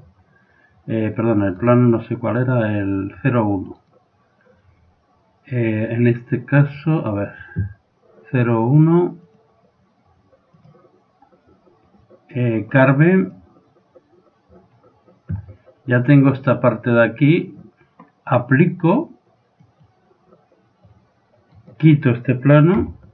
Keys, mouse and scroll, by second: 1.6 right click, 3.8 right click, 9.3-11.2 drag, 12.3-14.1 drag, 19.6-21.5 drag, 21.5 right click, 22.8 x.